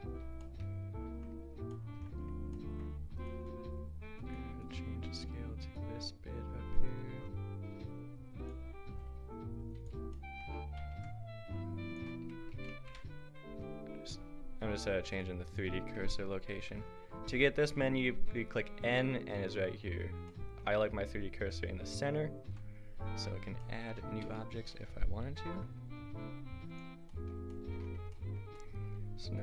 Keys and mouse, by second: 0.2 Tab, 3.4 Tab, 6.5 click, 7.1 s, 8.9 s, 10.9 n, 11.9 click, 12.9 Tab, 15.6-16.7 drag, 16.7 \, 17.6 n, 18.2 n, 22.5 n, 24.1 Tab, 25.8 a, 29.3-29.4 drag.